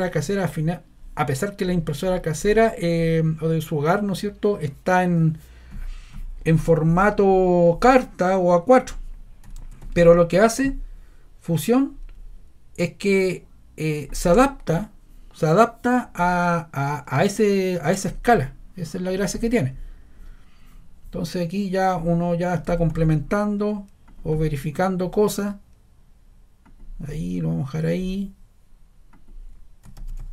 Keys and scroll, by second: 9.5 super+c, 9.7 super+v, 22.6 super+c, 22.8 super+v, 29.9 super+c, 30.1 super+v.